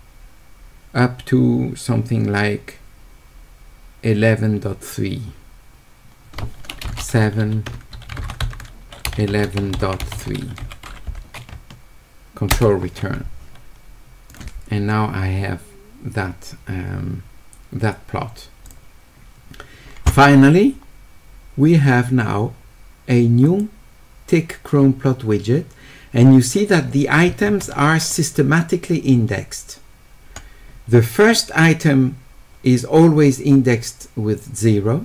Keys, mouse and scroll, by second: 14.3 click, 18.6 click, 23.4 click.